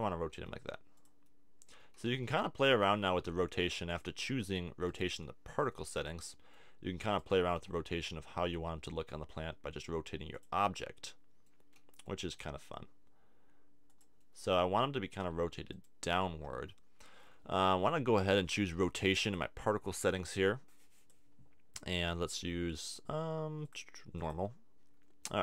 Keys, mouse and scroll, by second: 0.3 r, 2.0 r, 4.0 click, 5.7 middle click, 7.4 r, 7.8-9.0 right drag, 10.5 click, 10.7-12.2 middle drag, 12.2 r, 14.0-15.7 drag, 15.7 middle click, 16.3-17.3 right drag, 17.6-19.2 middle drag, 19.2-22.8 drag, 23.6-24.9 drag, 24.9-25.4 middle drag.